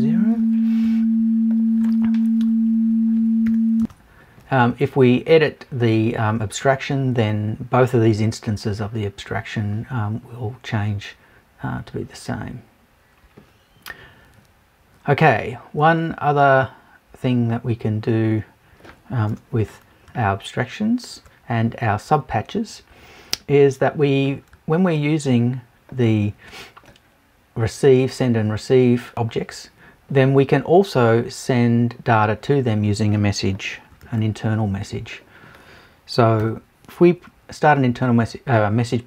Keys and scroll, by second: 0.8 super+Return, 3.8 Return, 19.3 BackSpace, 20.1 super+BackSpace.